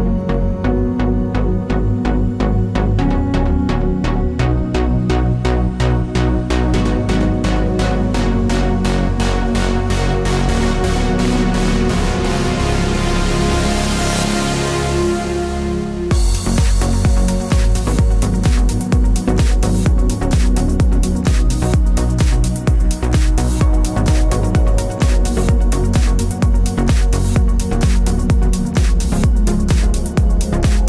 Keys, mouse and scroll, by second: 5.9-6.5 scroll down 3, 6.5-8.9 middle drag, 8.9 click, 11.3 click, 14.2 drag, 16.0 click, 20.0 click, 22.9 click.